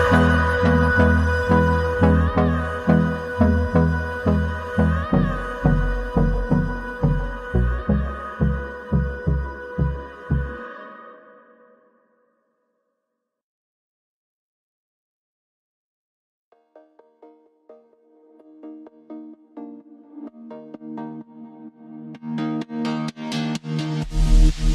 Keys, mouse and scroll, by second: 2.0 click, 2.7 s, 8.1 click, 8.3 x, 9.4 x, 10.4 click, 11.0 click, 11.7 x, 12.7 click, 14.0 Tab, 14.9 click, 15.0 z, 18.2 b, 19.2 click, 21.0 b, 21.8 s, 23.9 Tab.